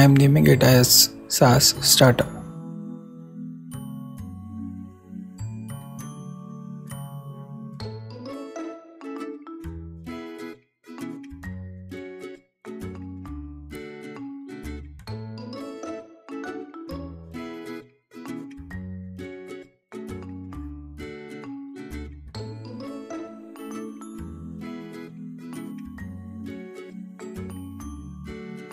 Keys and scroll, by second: 0.0-1.3 typing, 3.3 shift+s, 3.6 shift+a, 5.5 shift+space, 5.7 shift+s, 6.0 shift+t, 7.5 alt+p, 7.6 alt+Left, 9.0 shift+BackSpace, 9.2 shift+s, 10.3 super+s, 10.9 super+w, 14.9 shift+a, 15.4 shift+p, 16.5 shift+Return, 17.5 super+s, 21.8 alt+Up, 21.9 alt+Right, 22.3 alt+shift+Left, 22.8 alt+shift+super+Left, 22.9 alt+shift+super+c, 27.6 super+s.